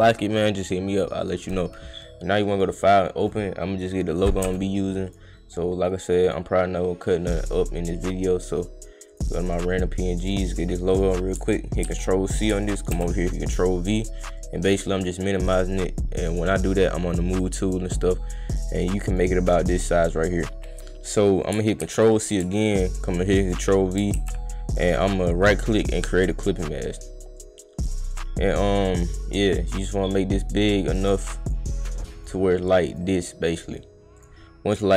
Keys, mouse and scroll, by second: 0.4 click, 1.2 click, 2.5 click, 3.2-3.5 drag, 5.1 click, 6.1 click, 6.2 click, 9.1 click, 9.2 click, 10.2 click, 10.9 click, 11.8 ctrl+c, 12.3 click, 12.9 ctrl+v, 14.2 click, 14.4 click, 15.4-17.4 drag, 17.9 click, 18.7 click, 19.8 click, 21.4 click, 21.8 ctrl+c, 22.2 click, 23.1 click, 23.5 click, 24.2 ctrl+v, 25.4 click, 26.2 click, 27.4 click, 28.0 click, 29.2 click, 29.7 click, 31.0-31.5 drag, 31.7 click, 32.7 drag, 34.2 click.